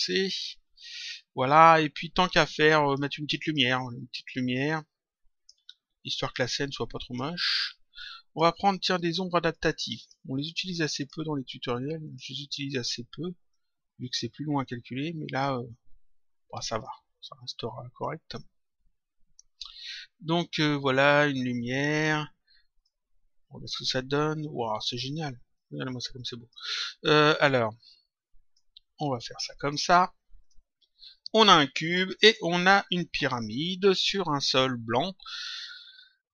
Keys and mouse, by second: 2.2 click, 3.4 click, 4.6 click, 6.2 click, 7.9 click, 9.4 click, 10.9 click, 12.0 click, 13.4 click, 15.2 click, 16.7 click, 20.4 click, 21.5 click, 22.7 click, 25.5 click, 26.9 click, 28.9 click, 30.4 click.